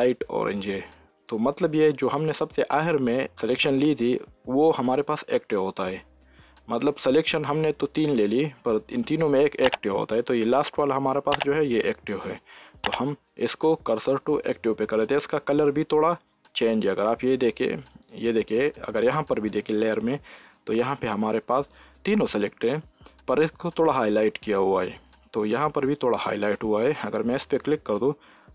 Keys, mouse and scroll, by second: 8.0 shift+s, 14.3 shift+s, 19.8 s.